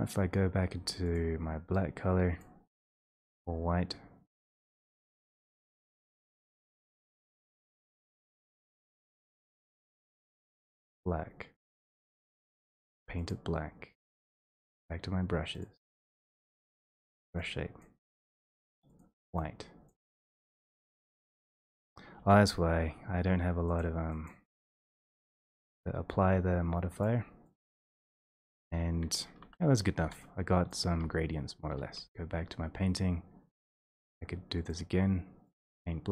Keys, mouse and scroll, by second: 1.9 4, 2.4 click, 3.4 click, 4.5 click, 5.2 click, 6.8 click, 7.7 click, 8.2 click, 9.1 click, 11.1 click, 12.5 click, 13.3 click, 14.6 click, 15.7 click, 16.7-17.9 typing, 17.9 click, 20.0 click, 20.7 ctrl+z, 21.4 click, 21.7 click, 22.2 ctrl+1, 23.8 click, 24.3 click, 25.2 middle click, 25.3 middle click, 26.1 middle click, 26.6 middle click, 27.0 click, 27.5 click, 29.5-30.0 typing, 30.7 click, 32.0 4, 34.7 click, 35.6 click.